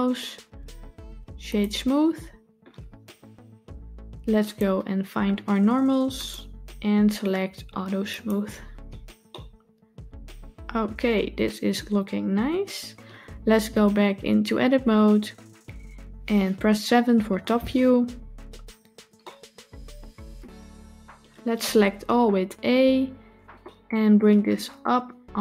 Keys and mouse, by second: 4.3 click, 6.0 click, 8.0 click, 9.2-12.3 middle drag, 14.7 Tab, 17.1 KP_7, 19.1-20.2 shift+middle drag, 22.4 a, 23.6 shift+middle click.